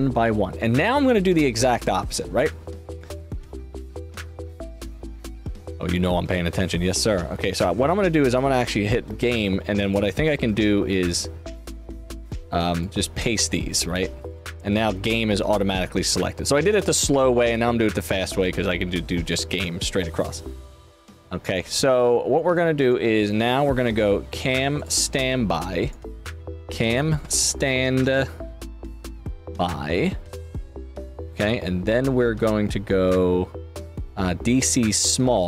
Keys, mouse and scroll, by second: 3.1 click, 7.4 click, 9.8 click, 10.7 ctrl+v, 10.9 ctrl+v, 11.6 click, 12.7 click, 12.9 ctrl+v, 13.3 shift+f, 13.5 shift+f, 13.7 shift+f, 14.2 click, 15.7 click, 19.5 click, 22.7 click, 24.7 click, 25.7 click, 26.0-27.8 typing, 28.9 shift+g, 30.9 click, 31.8 click, 35.3 click.